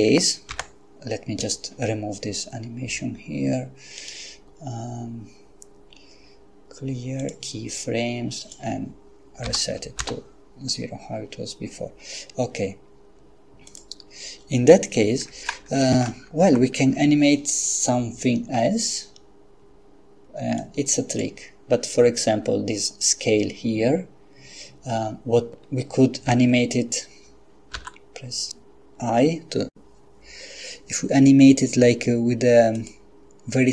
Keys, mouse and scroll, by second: 0.5 n, 4.0 right click, 7.2 click, 8.4 click, 9.4 0, 10.0 Return, 13.7 click, 16.4 Left, 20.6 click, 27.7 i, 32.8 click.